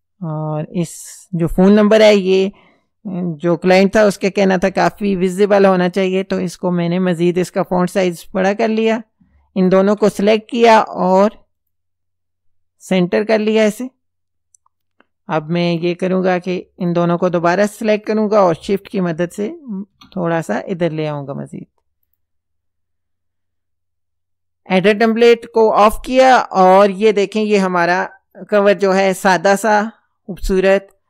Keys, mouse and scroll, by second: 2.1 click, 4.0 KP_4, 4.3 KP_8, 4.7 KP_Enter, 6.2 click, 7.3 click, 9.6 ctrl+click, 11.6 click, 13.4 click, 15.7 click, 16.9 ctrl+click, 18.5 shift+Left, 19.9 shift+Left, 22.1 click, 25.0 click.